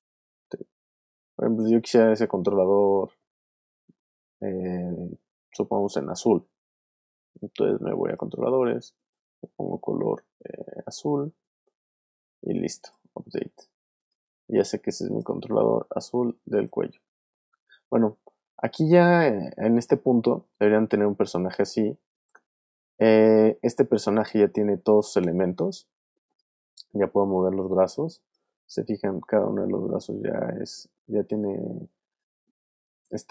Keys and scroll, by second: 1.5 super+z, 16.9 super+z, 19.7 space, 20.6 alt+space, 21.5 alt+space, 25.4 alt+v, 32.4 alt+space.